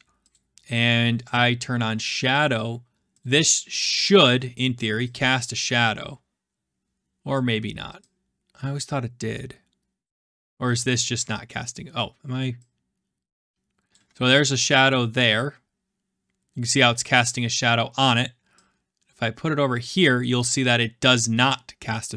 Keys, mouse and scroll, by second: 0.3 click, 1.3 click, 2.4 click, 3.2 click, 4.8 scroll, 5.5-5.8 scroll, 7.3 click, 10.0-10.4 drag, 10.7-11.6 scroll, 12.4-13.5 middle drag, 13.8 click, 17.3-18.4 scroll, 20.0-21.4 drag.